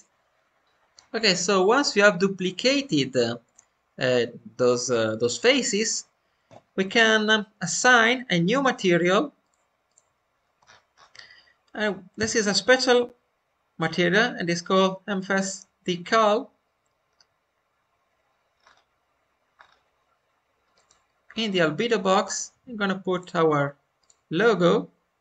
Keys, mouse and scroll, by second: 8.4-10.2 drag, 10.2 scroll up 1, 10.3 scroll down 2, 12.2-15.2 drag, 12.2-13.4 scroll down 4, 16.3 scroll down 2, 20.6-25.1 drag, 20.6 scroll down 6, 25.1 middle click.